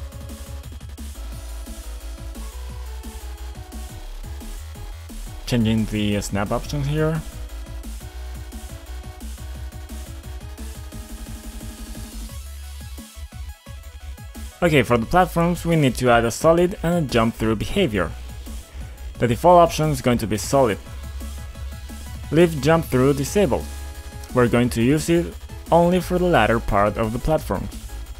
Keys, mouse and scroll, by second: 0.8 click, 2.1 click, 2.9 click, 5.2 click, 5.9-9.2 typing, 6.5 click, 7.1 click, 7.7 click, 8.3 click, 9.5 click, 11.0 click, 11.7 click, 12.0 click, 12.5 click, 14.3 click, 14.4 click, 15.9 click, 16.1 double click, 17.5 double click, 18.3 click, 20.5 click, 21.2 click, 22.5 click, 23.4 click, 24.3 click, 24.9 click, 27.8 click.